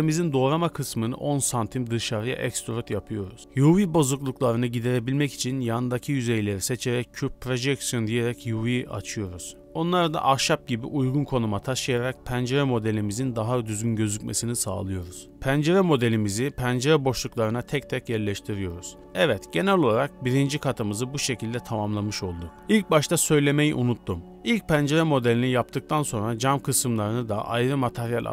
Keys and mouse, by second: 1.1 middle click, 2.6 middle click, 3.6 middle click, 4.3 shift+middle click, 5.0 a, 5.1 a, 6.8 middle click, 7.7 Tab, 8.6-9.2 middle drag, 9.5 Tab, 9.6 middle click, 10.0 a, 10.7 u, 12.2 s, 13.6 click, 14.0 s, 14.5 g, 15.2 shift+d, 16.2 s, 17.5 w, 17.9 Tab, 17.9 middle click, 18.9 middle click, 20.5-21.1 middle drag, 21.1-21.6 middle drag, 26.8-28.3 middle drag, 27.5 z.